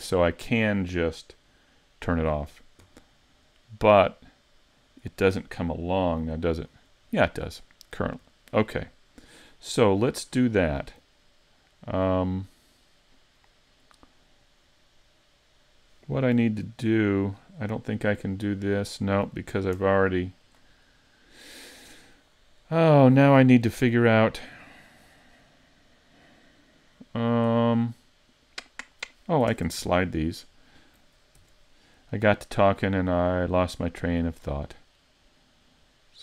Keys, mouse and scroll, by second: 0.4 click, 1.6 click, 3.0-3.6 scroll down 3, 3.6 middle click, 6.6 click, 7.1-7.5 scroll up 3, 7.5 middle click, 8.3 shift+middle click, 10.5 middle click, 10.6 scroll up 2, 15.2 middle click, 16.8 alt+space, 19.7 alt+space, 20.8 middle click, 22.4 middle click, 24.3 middle click, 29.5 ctrl+Tab, 30.3 right click, 31.4 ctrl+e.